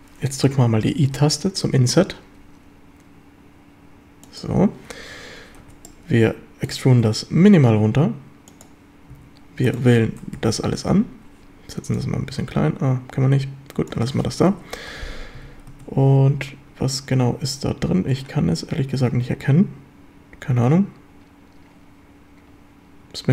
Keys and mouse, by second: 1.2 i, 4.3 click, 5.7 z, 5.9 click, 7.0 e, 8.5 click, 9.2 a, 10.4 ctrl+l, 12.0-13.9 drag, 14.6 KP_7, 14.9 z, 15.4 a, 18.0 ctrl+s.